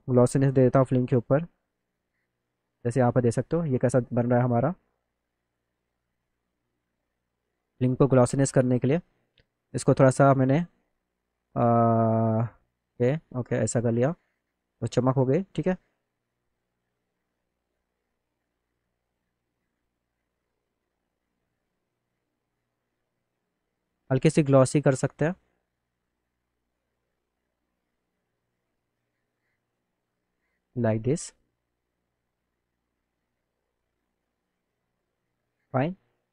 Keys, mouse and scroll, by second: 1.5 click, 1.8 click, 2.8 click, 5.2 click, 6.5 click, 9.6 click, 10.5-12.4 drag, 13.1 click, 17.0-18.1 drag, 24.8 click, 26.0-27.7 drag, 28.5 click, 31.3-32.4 drag, 32.8-34.3 drag, 35.2 click.